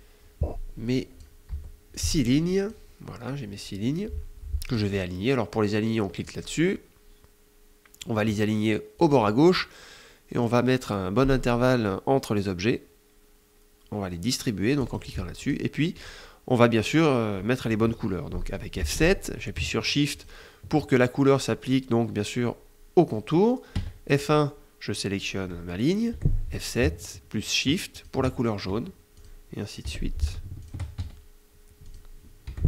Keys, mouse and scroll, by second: 1.3 Delete, 1.8 click, 6.0 click, 8.8 click, 14.6 click, 15.2 click, 15.7 click, 18.5 F7, 19.9 shift+click, 23.5 F1, 23.9 click, 25.9 F7, 27.7 shift+click, 28.5 F1, 28.9 click, 29.6 F7, 30.3 shift+click, 30.7 shift+F1, 31.5 click, 32.2 F7.